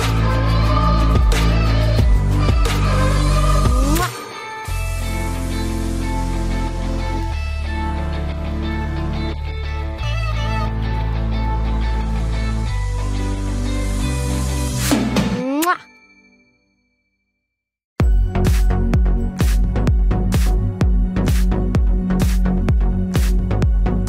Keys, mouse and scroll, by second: 0.6 ctrl+n, 0.9 Tab, 2.0 a, 4.2-6.1 right drag, 6.3 ctrl+s, 6.6 z, 8.6 ctrl+s, 12.1 ctrl+s, 12.8 z, 13.5 a, 15.1 n, 17.1-19.1 drag, 18.1 n, 19.1-22.8 middle drag.